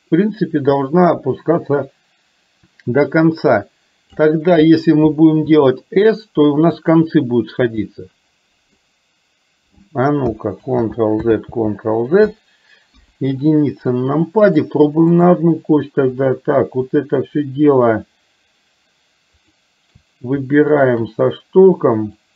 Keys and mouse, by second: 7.9-8.9 middle drag, 10.7 ctrl+z, 11.5 ctrl+z, 12.9 KP_1, 14.8-15.4 drag, 16.3 click, 19.5 shift+click, 20.8 shift+click.